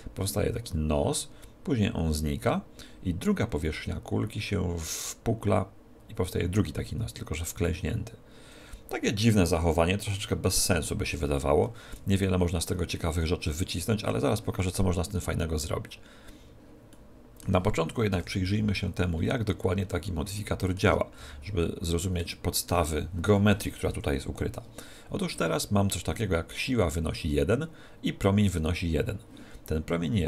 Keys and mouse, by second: 13.0-18.8 middle drag, 18.1 KP_1, 18.4 z, 19.2-24.2 middle drag, 21.2 n, 23.9 z.